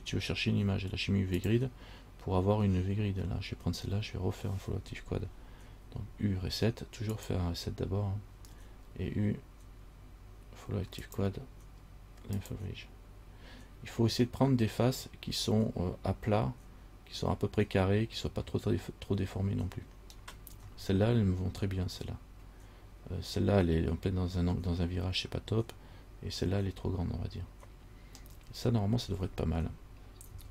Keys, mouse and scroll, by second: 6.0 u, 8.5 u, 28.4-30.5 scroll down 5.